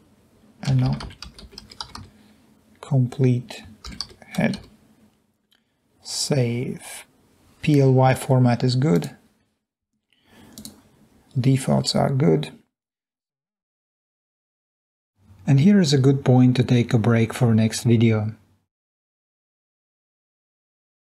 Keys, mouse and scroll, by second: 0.5-2.6 typing, 3.6-5.2 typing, 10.5 click.